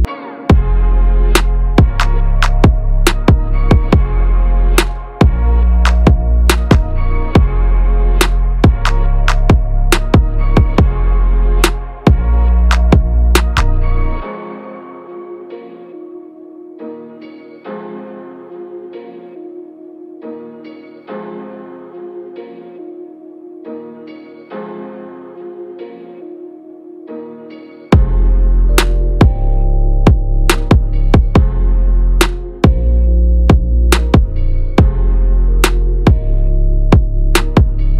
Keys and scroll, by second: 9.2 ctrl+a, 16.3 ctrl+a.